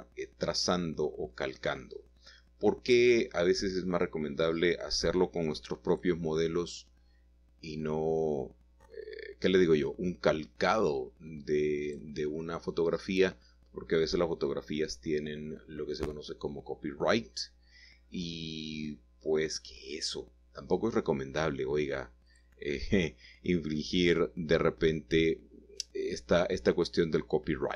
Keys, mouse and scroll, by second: 0.1-1.1 scroll up 1, 1.4 3, 1.9 click, 3.2 g, 4.5 x, 7.3 click, 8.7 click, 9.9 typing, 11.5 shift+middle click, 12.3 shift+middle click, 13.5 typing, 14.1-15.2 drag, 14.7-15.7 typing, 17.3 shift+click, 19.7 typing, 21.7 x, 24.4 click, 26.4 click.